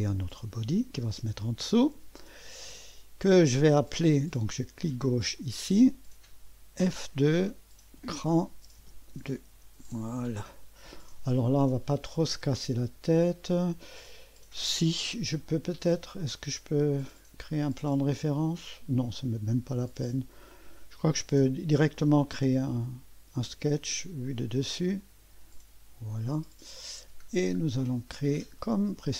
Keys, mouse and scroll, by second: 0.0 click, 5.4 click, 6.8 F2, 7.6-9.6 typing, 10.1 Return, 12.6-13.4 typing, 12.8 click, 14.1 click, 14.9-15.6 typing, 16.2 click, 18.1-19.4 typing, 18.9 click, 22.7 click, 24.2 click, 25.0 click, 25.6 click, 29.0 click.